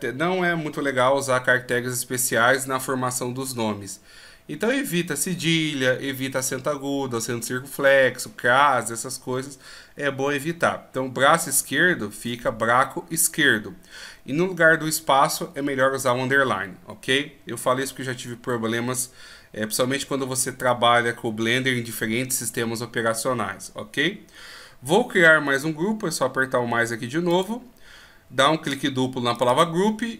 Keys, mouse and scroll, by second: 27.3 click, 29.4 click, 29.5 click.